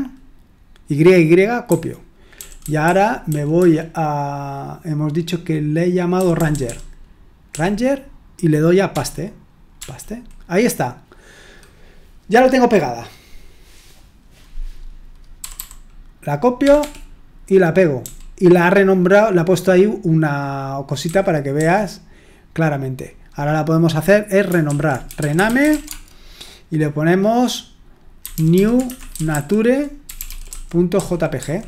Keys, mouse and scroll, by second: 1.7-3.6 typing, 6.1-7.5 typing, 8.9-9.8 typing, 15.4 typing, 16.6 typing, 21.0-22.1 typing, 24.8-26.4 typing, 28.0-31.6 typing.